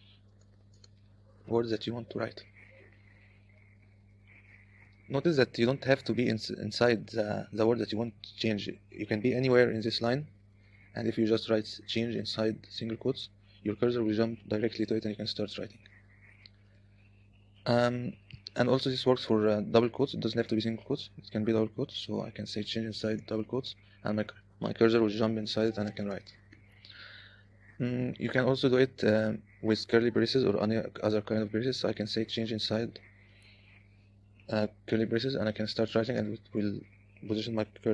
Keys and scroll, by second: 0.0-2.3 typing, 2.4 Escape, 4.3 u, 7.1 l, 7.3 l, 8.5 0, 10.2 w, 10.3 w, 10.6 w, 12.1 c, 12.4 i, 13.0 ', 14.3 Escape, 15.5 Escape, 15.7 typing, 19.5 j, 19.8 0, 22.7-23.8 typing, 25.1-29.2 typing, 32.5-34.0 typing, 35.4-37.0 typing, 37.1 Escape.